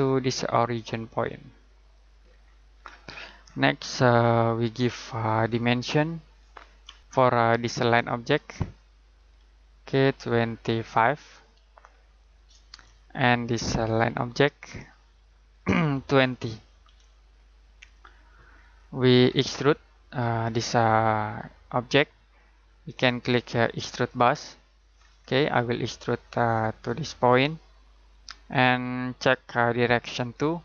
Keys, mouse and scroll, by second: 2.2 scroll down 1, 2.4-3.1 scroll up 1, 4.7-6.3 scroll down 1, 8.3 click, 10.6-11.3 typing, 12.2 click, 16.2-16.8 typing, 17.8 click, 18.5 scroll down 1, 18.7-21.4 scroll up 1, 22.9 click, 25.0 scroll down 1, 25.1 scroll up 1, 25.4-26.8 scroll down 1, 26.8 click.